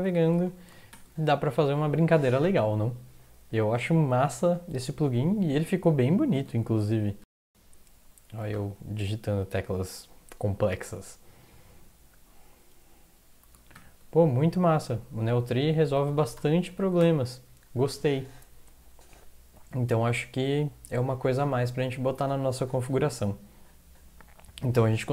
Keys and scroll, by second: 0.2 o, 0.3 ctrl+x, 0.9 o, 6.5 ctrl+x, 7.2 \, 8.5 ctrl+\, 13.8 ctrl+\, 16.1 ctrl+x, 16.3 0, 16.8 ctrl+x, 17.0 0.